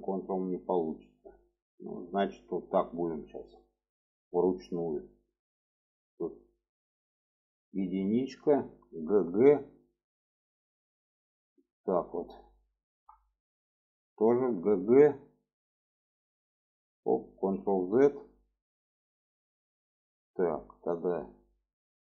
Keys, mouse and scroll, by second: 3.7 shift+middle click, 7.1 1, 7.6 click, 8.7 g, 12.5 shift+middle click, 14.2 g, 17.1 ctrl+z.